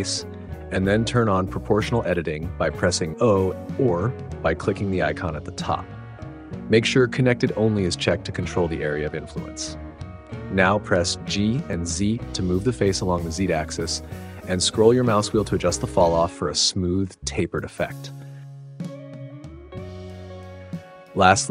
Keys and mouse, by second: 1.2-5.0 drag, 5.7 click, 6.4-9.6 drag, 12.4 g, 13.2 z, 19.0 click, 19.3 click.